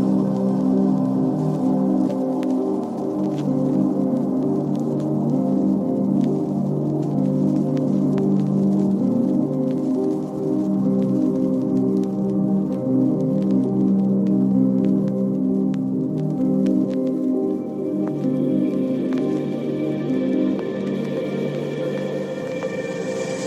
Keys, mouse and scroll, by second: 0.1 click, 1.0-2.2 drag, 3.4 click, 4.4 click, 5.6 click, 8.2 g, 10.5 click, 10.8 click, 12.1 click, 14.4 g, 16.1 click, 16.4 click, 18.1 click, 23.2 click.